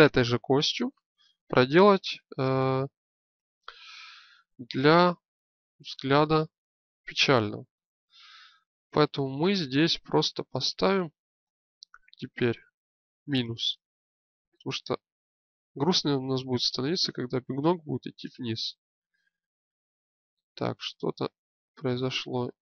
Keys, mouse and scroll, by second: 6.7-7.3 scroll down 1, 9.5 click.